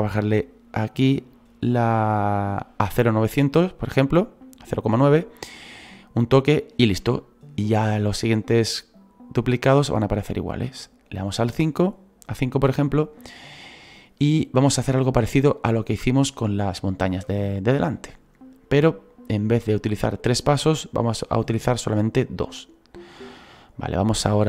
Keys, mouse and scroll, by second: 0.5-4.4 drag, 4.4 middle click, 4.6 click, 5.0-7.2 middle drag, 7.2-8.2 scroll down 3, 8.2-9.1 scroll down 1, 9.1-9.6 scroll down 1, 9.6-22.8 drag, 17.5-18.4 scroll down 8, 23.1-24.4 middle drag.